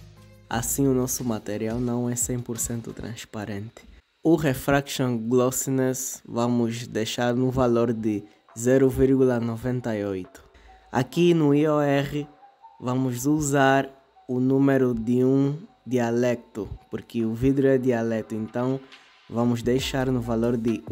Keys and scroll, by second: 0.4 typing, 5.5-7.2 typing, 8.0 Return, 12.4 BackSpace.